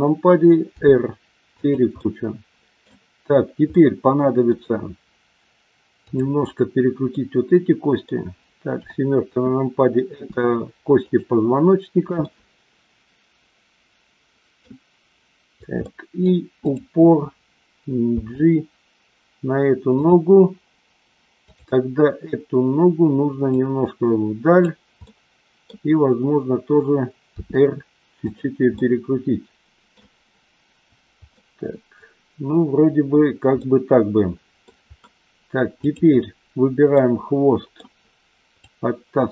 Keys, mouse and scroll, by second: 0.7 r, 1.5 click, 2.0-2.7 middle drag, 3.7-4.3 middle drag, 6.1 click, 7.2-8.1 middle drag, 8.7 KP_7, 10.1 r, 12.2-14.6 middle drag, 15.8 middle click, 16.6 click, 18.1 g, 20.0 click, 23.5-24.6 drag, 25.0 middle click, 27.3 r, 28.7-29.8 middle drag, 31.4-33.2 middle drag, 33.6-34.2 middle drag, 34.4-34.7 middle drag, 35.8-36.5 drag, 36.8-37.7 middle drag, 38.6-39.3 drag.